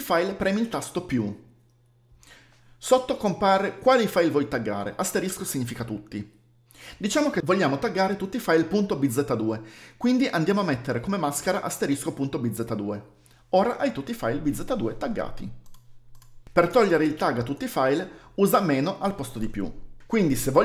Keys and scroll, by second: 13.1 typing, 17.6 space.